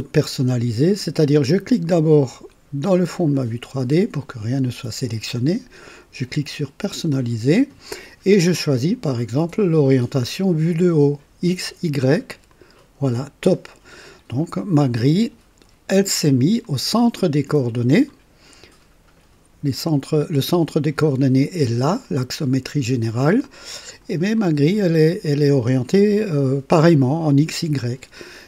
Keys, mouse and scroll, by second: 3.1 click, 6.8 click, 12.4 click, 15.0-16.2 drag, 16.6-18.2 drag, 20.6 click, 22.0 click, 23.4-24.2 drag, 24.3-27.0 drag.